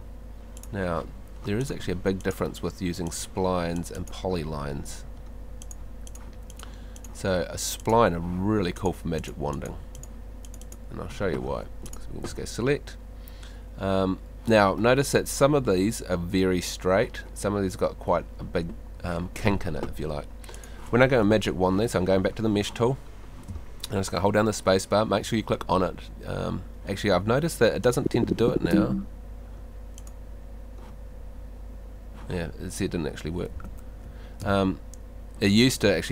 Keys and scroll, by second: 11.5 Home, 23.5 space, 35.8 space.